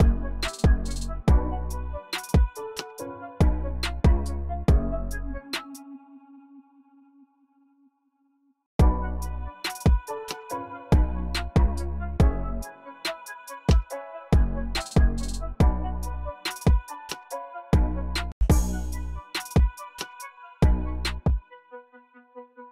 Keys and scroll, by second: 1.1-2.1 typing, 5.5 space, 11.8-13.5 typing, 16.1-18.2 typing, 17.6 super+a, 17.8 alt+shift+Page_Up, 20.7 alt+shift+Page_Down, 22.2 alt+shift+Page_Up.